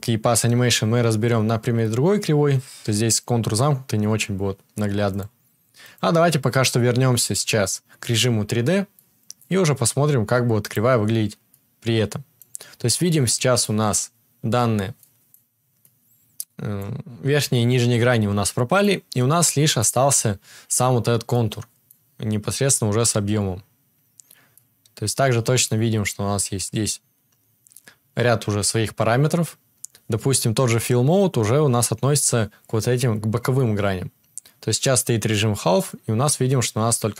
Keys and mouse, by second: 10.7-37.1 middle drag.